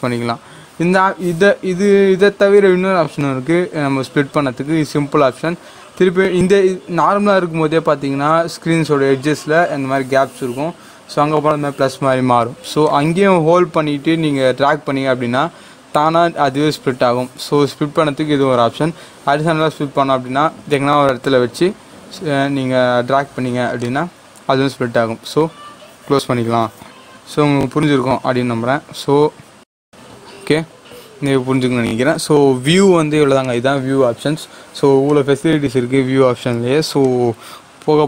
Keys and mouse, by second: 12.8-23.0 drag, 23.8-29.2 drag, 29.6-33.4 drag.